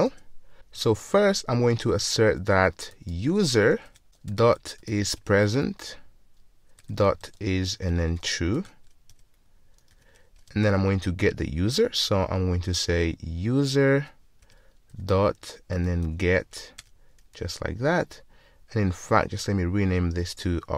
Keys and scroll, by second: 3.9 Return, 5.2 Return, 14.5 Return.